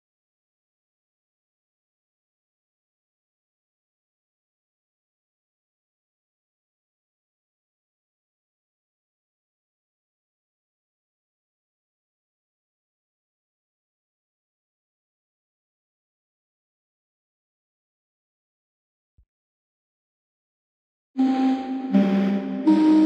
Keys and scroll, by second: 3.8 space, 4.6 space, 5.6 ctrl+z, 8.9 space, 14.0 space, 15.9 space, 17.3 space.